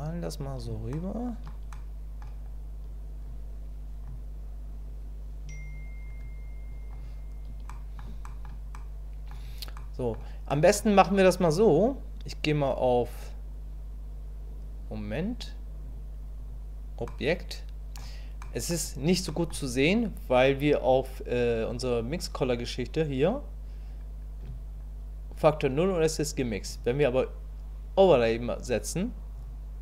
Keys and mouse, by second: 0.9 shift+middle click, 1.7 click, 3.3 click, 4.9-6.0 drag, 6.7 click, 7.7 middle click, 8.2 shift+middle click, 8.7 middle click, 9.8 middle click, 10.5 middle click, 15.8 click, 17.1 middle click, 18.4 middle click, 19.3 middle click, 26.7-29.5 drag.